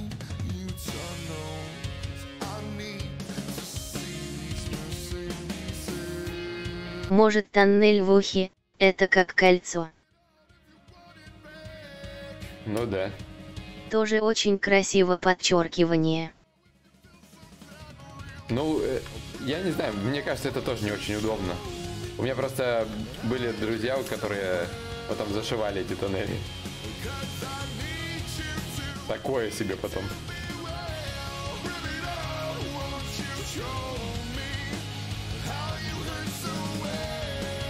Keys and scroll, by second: 10.1 ctrl+z, 22.8 ctrl+z.